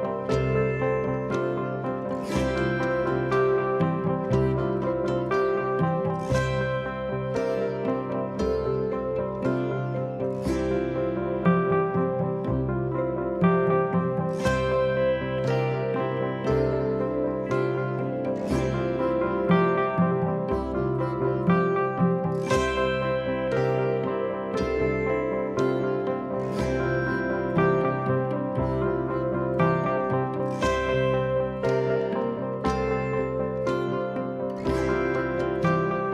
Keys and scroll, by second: 0.5 ctrl+d, 0.7 Escape, 4.4 4, 6.1 3, 6.6 ], 9.2-12.0 typing, 14.0 2, 21.1 ], 24.7 ctrl+z, 28.1 ], 28.9 4, 29.5 3, 30.4 shift+i, 32.7 shift+f.